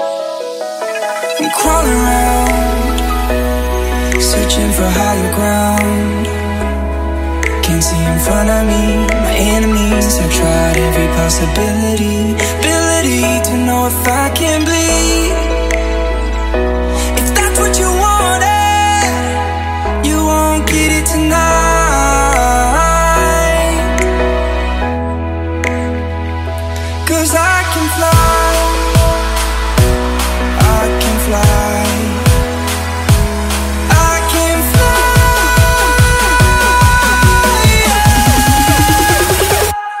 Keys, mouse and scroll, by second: 0.7 right click, 1.2 click, 1.7 F10, 2.5-3.5 drag, 5.0 right click, 5.7-9.5 drag, 9.0-11.2 typing, 11.9 click, 15.8 F10, 16.2 click, 17.6 right click, 19.0-20.6 drag, 20.4-21.8 typing, 22.4 Return, 23.4-27.5 drag, 27.6 F10, 27.8-29.0 right drag, 29.1 click, 29.6-31.3 typing, 33.2 Return, 34.1-36.0 drag, 36.4 F10, 36.7 right click, 37.6 click, 38.2 KP_1, 38.4 KP_0, 39.1 KP_1, 39.3 KP_0, 39.9-40.0 drag.